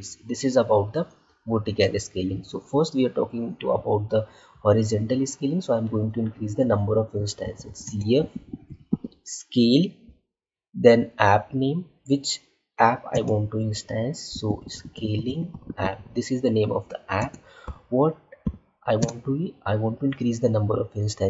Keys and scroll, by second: 7.7 space, 13.0 space, 17.1 space, 18.9 space.